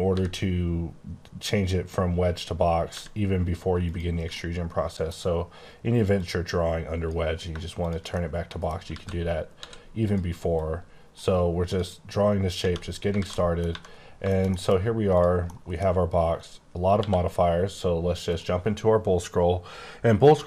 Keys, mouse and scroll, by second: 0.1 b, 2.9 g, 3.8 click, 4.3 middle click, 6.1 click, 8.1 middle click, 8.9 alt+z, 9.3 scroll up 4, 9.5 d, 10.0 click, 10.5 click, 11.7 click, 12.6 space, 12.9 scroll down 2, 13.2 alt+z, 13.3 middle click, 13.7 1, 13.9 scroll down 4, 14.2 shift+middle click, 14.7-15.1 scroll down 1, 15.1 click, 15.4 scroll up 1, 15.6 middle click, 16.9 q, 18.2 click.